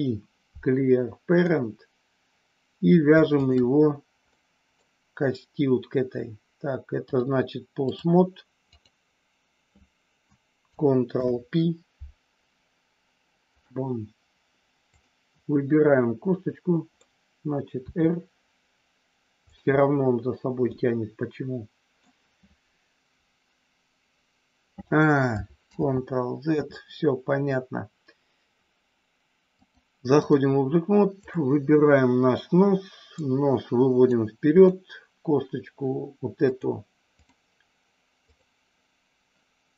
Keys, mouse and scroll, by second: 4.4 middle click, 7.1 click, 11.0 ctrl+p, 15.9-17.0 middle drag, 17.9 r, 19.7-22.0 middle drag, 25.6 ctrl+z, 29.5 click, 33.1 click, 34.6 click, 36.4 click, 38.2 click.